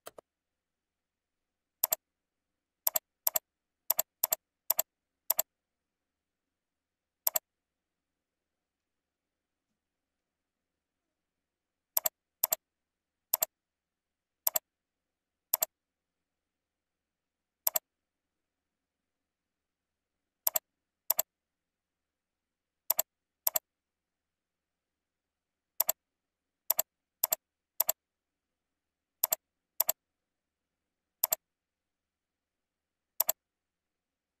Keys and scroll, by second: 14.2 ctrl+c, 14.8 ctrl+v, 18.6 ctrl+Up, 29.0 ctrl+c, 29.9 ctrl+v, 30.7 ctrl+z, 31.9 ctrl+v.